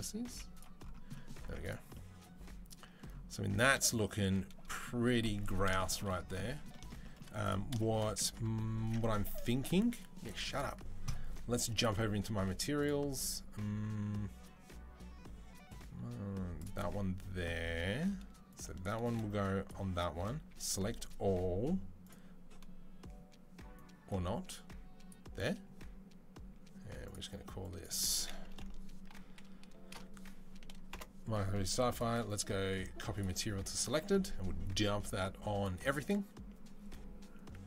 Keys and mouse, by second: 0.1 z, 1.2 Tab, 1.4 click, 3.6 shift+middle click, 5.5 shift+middle click, 6.6 shift+middle click, 7.5 shift+middle click, 8.5 ctrl+click, 8.9 ctrl+s, 8.9-11.6 middle drag, 11.6 click, 11.7-18.3 middle drag, 18.3-19.7 drag, 19.7-21.8 middle drag, 20.3 a, 21.8 click, 21.9-23.5 middle drag, 23.5-25.1 drag, 25.1-26.9 middle drag, 26.9-31.9 drag, 28.4 BackSpace, 31.9 middle click, 32.1-37.6 drag.